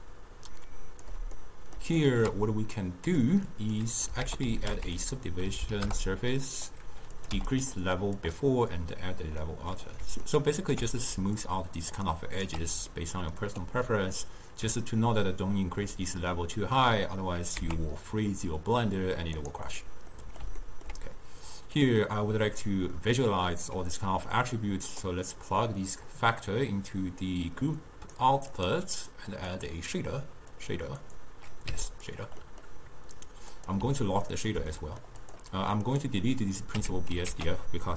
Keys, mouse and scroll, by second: 10.4-11.5 ctrl+middle drag, 11.5 click, 12.1-25.1 right drag, 28.2-36.8 drag, 36.8 x.